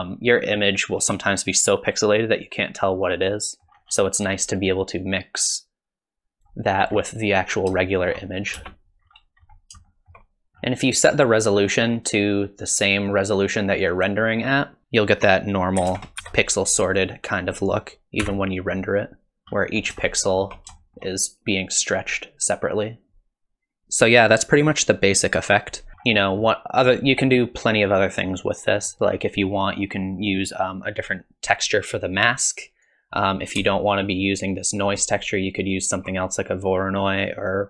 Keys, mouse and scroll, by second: 3.3 middle click, 3.7 scroll down 1, 3.9-5.0 scroll up 9, 5.0 click, 5.0-6.4 scroll up 1, 6.8 scroll up 2, 7.8 shift+middle click, 8.6 space, 9.0-9.5 scroll down 5, 9.4 scroll up 2, 9.9 shift+middle click, 10.5-11.6 scroll down 2, 12.8 click, 14.0 click, 25.9 middle click, 25.9-27.4 scroll up 6, 26.2 middle click, 28.7 middle click, 32.6 click, 33.9 ctrl+shift+click, 35.0 click.